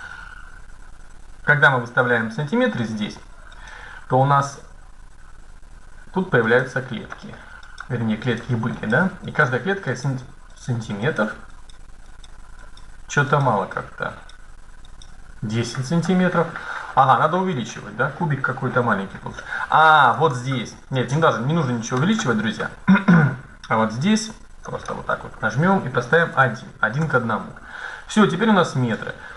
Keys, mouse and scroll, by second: 0.7-2.1 middle drag, 6.1-10.0 middle drag, 10.7-16.1 middle drag, 17.2-19.1 right drag, 19.9-21.7 drag, 22.1-23.6 middle drag, 24.4-26.2 drag, 28.2 middle click.